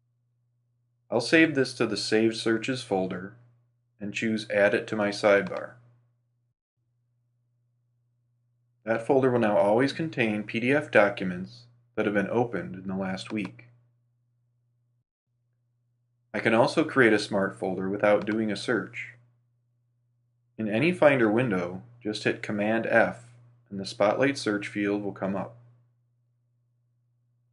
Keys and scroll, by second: 20.5 super+f.